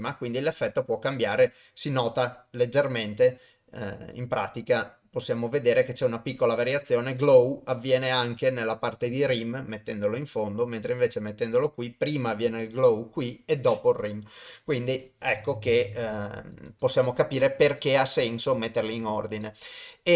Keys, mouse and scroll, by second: 2.3 click, 4.2-4.9 drag, 10.0-11.1 drag, 15.3 click, 16.7 click, 17.7 click.